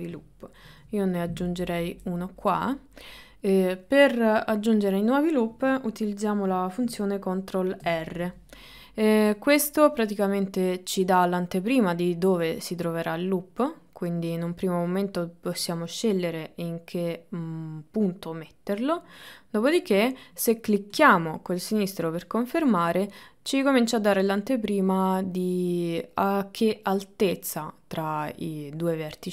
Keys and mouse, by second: 0.7 ctrl+r, 7.9 ctrl+r.